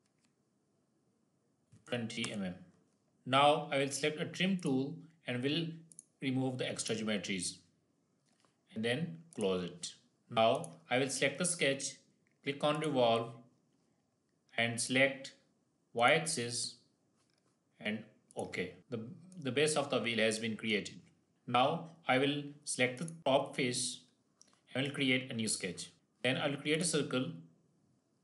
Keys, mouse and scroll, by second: 4.5 click, 9.2 click, 10.1 shift+middle click, 10.4 click, 12.6 click, 18.2 click, 18.8-19.2 scroll down 1, 19.5 middle click, 20.5 middle click, 21.3-21.9 scroll up 1, 21.9 scroll down 1, 22.8 click, 23.1 click, 25.5 click, 25.9-26.5 scroll down 1, 26.6 click.